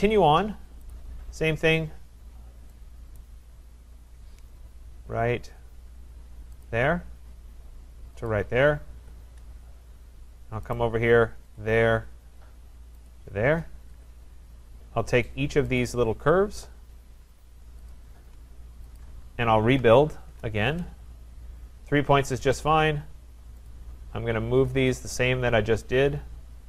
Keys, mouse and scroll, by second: 0.0 right click, 0.9 click, 3.2 right click, 3.5-4.2 scroll, 6.7 click, 8.3 click, 9.0 Return, 9.6 scroll, 10.1-10.7 scroll, 10.7 right click, 11.6 click, 13.1 click, 13.9 Return, 15.8 click, 16.1-16.6 scroll down 2, 16.7-17.0 scroll down 2, 17.9 shift+click, 19.0 click, 19.0-19.7 scroll, 19.5-20.4 typing, 22.7 click, 23.7 click, 23.8-24.6 typing, 25.0 click, 25.2 click, 26.5-26.6 scroll.